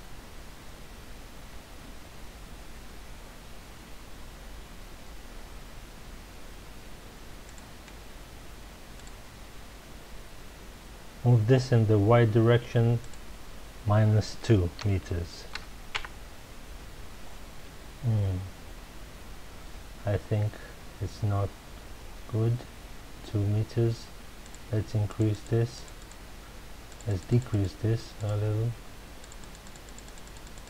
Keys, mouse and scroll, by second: 7.5 click, 8.9 click, 13.0-16.0 drag, 16.0 KP_Enter, 24.4-26.2 drag, 26.9 click, 27.1 click, 27.3 click, 27.5 click, 28.1 click, 29.2-30.6 drag.